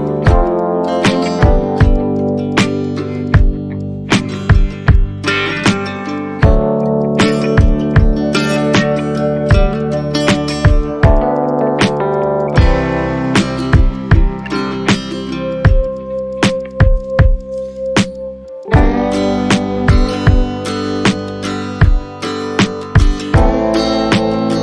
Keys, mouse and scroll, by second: 0.6 shift+click, 1.3 shift+click, 1.4 alt+click, 1.9 shift+click, 2.3 shift+click, 2.9 shift+click, 3.2 shift+click, 3.3 alt+click, 4.1 shift+click, 4.6 scroll down 1, 4.9 alt+click, 6.1 alt+click, 7.4 shift+click, 7.9 alt+click, 10.3 shift+click, 10.4 alt+click, 11.1 shift+click, 11.6 shift+click, 12.2 shift+click, 12.8 shift+click, 12.9 alt+click, 13.6 shift+click, 14.6 shift+click, 14.8 ctrl+z, 14.9 ctrl+z, 15.1 shift+click, 15.9 shift+click, 16.3 shift+click, 16.6 shift+click, 16.7 alt+click, 17.5 shift+click, 18.1 shift+click, 18.1 shift+click, 18.5 shift+click, 18.6 shift+click, 18.7 alt+click, 19.3 scroll down 1, 19.9 Tab, 21.1 Tab, 23.0 Tab, 23.4 ctrl+z, 23.6 ctrl+z, 23.8 ctrl+z, 23.9 ctrl+z, 24.2 Tab.